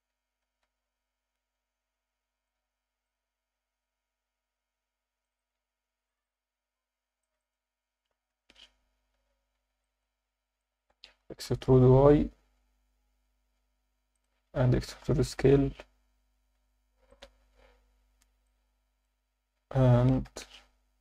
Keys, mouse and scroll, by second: 0.1 Tab, 0.8 ctrl+2, 4.6 Tab, 5.2 click, 5.4 click, 6.1 click, 6.2 click, 7.2 click, 7.4 click, 9.1 z, 9.8 alt+shift+middle click, 10.6 ctrl+alt+middle click, 11.4 e, 11.5 y, 14.1 click, 15.0 e, 15.0 s, 17.1 click, 18.4 alt+middle click, 20.2 KP_3.